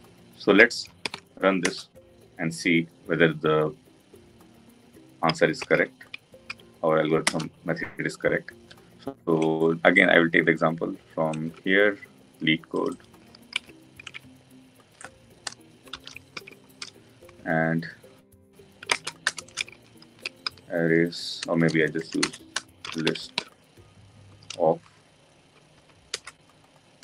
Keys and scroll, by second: 1.7 Return, 7.2 Return, 16.4 ctrl+v, 25.8 Return.